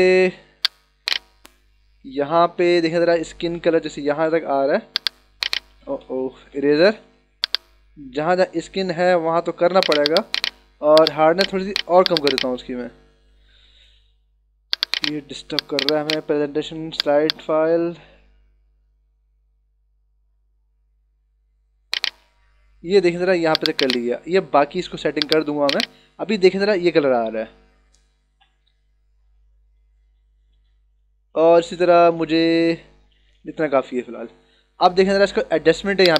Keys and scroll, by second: 0.7 h, 2.6 b, 6.4 ctrl+alt+z, 6.9 e, 13.9 d, 26.3 ctrl+-, 28.2 ctrl+-, 28.6 ctrl+=, 31.3 ctrl+=, 33.1 ctrl+-.